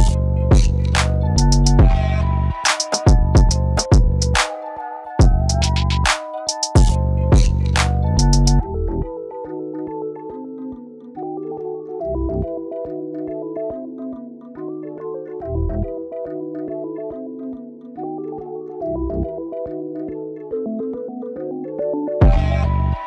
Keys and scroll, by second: 5.7 ctrl+g, 8.7-10.8 typing.